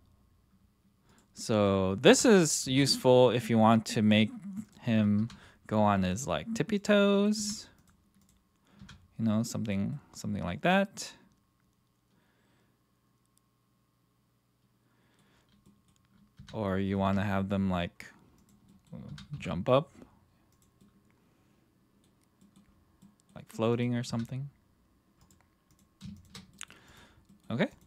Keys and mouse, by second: 1.3 middle click, 2.1 r, 2.6 x, 4.1 click, 4.6 click, 5.2 r, 6.8 click, 7.4 r, 7.8 right click, 8.2 right click, 8.8 r, 9.6 right click, 9.9-15.2 middle drag, 15.6 middle click, 16.4 r, 17.0 x, 18.6 middle drag, 19.0 r, 19.3 z, 20.5 click, 20.8-22.0 middle drag, 22.4 middle drag, 23.0-23.3 middle drag, 23.8 click, 24.1 r, 25.2-26.0 drag, 26.1 shift+click, 26.5 middle click, 27.3 middle drag, 27.7 click.